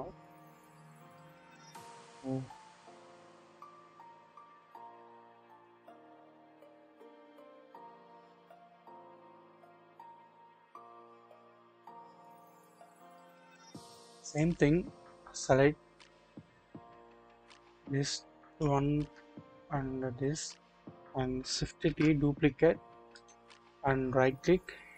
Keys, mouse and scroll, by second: 1.0 middle click, 10.7-11.4 scroll down 1, 11.4-12.9 scroll up 1, 13.4-14.3 scroll up 1, 14.3 middle click, 14.3 scroll down 1, 18.4 shift+click, 21.8 typing, 23.1 right click, 24.4-24.9 scroll down 1.